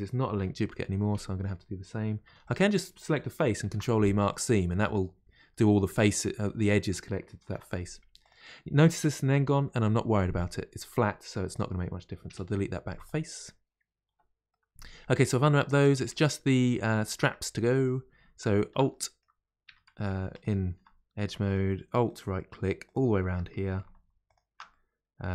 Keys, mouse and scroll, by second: 0.4 KP_Divide, 1.4 middle click, 1.7-2.5 scroll down 2, 14.1 KP_Divide, 14.5 middle click, 15.0-15.4 scroll down 1, 15.4-16.5 middle drag, 16.6-17.6 middle drag, 17.6-22.1 middle drag, 22.1 alt+shift+click, 24.7-25.3 middle drag.